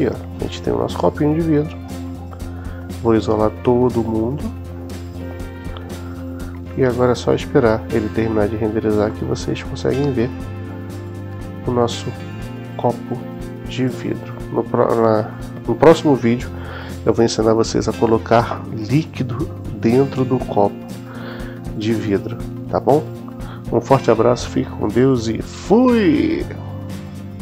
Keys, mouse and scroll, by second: 1.0-1.9 middle drag, 4.3 click, 5.0 click, 9.0-15.5 middle drag, 9.5 typing.